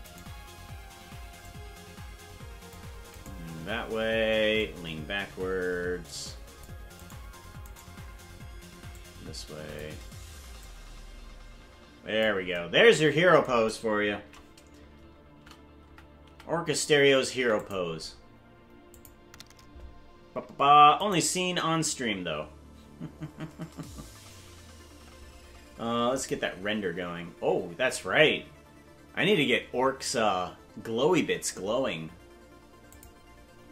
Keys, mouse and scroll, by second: 0.2 right click, 1.4-2.7 drag, 3.3 right click, 4.5-6.7 drag, 7.1 right click, 7.9 right click, 8.9 click, 10.6-12.2 drag, 14.1 shift+`, 18.9 click, 21.0 right click, 26.2 click, 33.0 click.